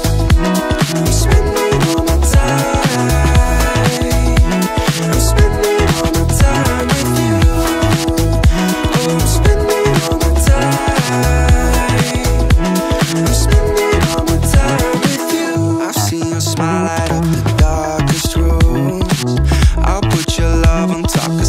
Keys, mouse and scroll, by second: 0.2 click, 1.1 click, 2.1 r, 9.9 ctrl+click, 10.7 click, 11.0 s, 13.2 KP_Decimal, 13.3 KP_2, 14.0 click, 19.5 ctrl+g.